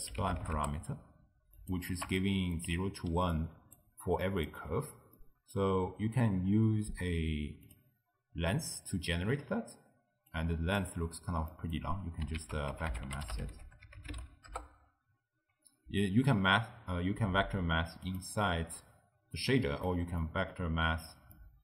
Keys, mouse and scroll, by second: 2.2-3.3 ctrl+middle drag, 3.3 d, 3.4-3.8 drag, 3.8-4.1 d, 4.3 click, 4.5 d, 5.2-7.8 middle drag, 7.8 click, 10.3-11.6 drag, 11.6 middle click, 12.0-12.4 scroll down 1, 12.4 ctrl+a, 19.4 click, 20.2 middle click, 20.8-21.4 scroll down 1, 21.4-21.6 middle drag.